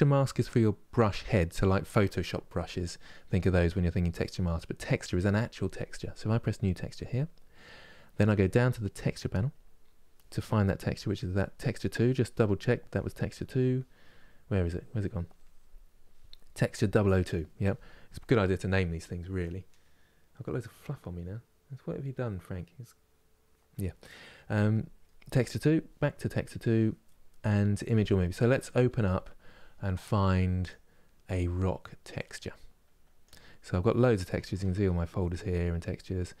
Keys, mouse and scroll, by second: 6.8-32.0 drag.